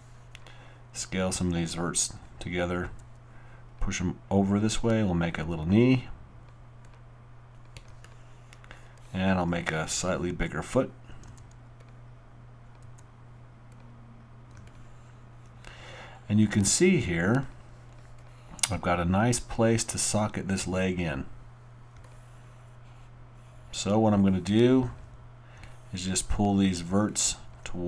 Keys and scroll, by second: 1.4 r, 2.8-3.5 typing, 10.3 alt+e, 11.2-12.8 typing.